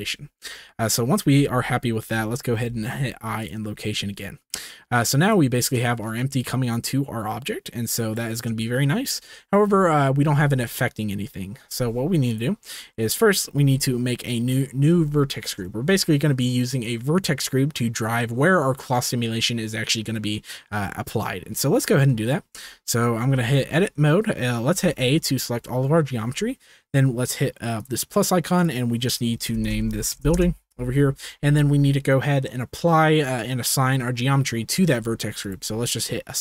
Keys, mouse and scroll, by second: 0.5 shift+middle click, 2.4 i, 4.5 click, 4.7 middle click, 4.8 click, 4.9 click, 5.2 middle click, 5.7 shift+middle drag, 6.5-8.1 drag, 8.4-11.0 shift+middle drag, 12.3 click, 12.9 shift+middle drag, 15.7 shift+middle click, 22.2 shift+middle drag, 23.2 Tab, 24.7 a, 28.7-30.3 drag, 35.5-36.4 drag.